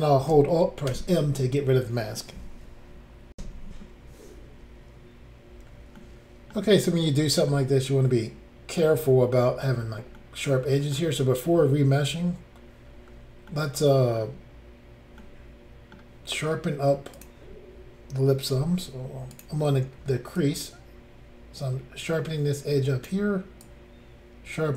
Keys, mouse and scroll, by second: 0.9 alt+m, 3.3 Insert, 6.0 middle click, 7.0 scroll down 1, 7.5 middle click, 10.2 middle click, 13.0-13.5 scroll down 1, 13.5 middle click, 15.2 middle click, 17.2 click, 18.4 click, 18.5 f, 19.3 click, 20.4 ctrl+click, 23.6 ctrl+click.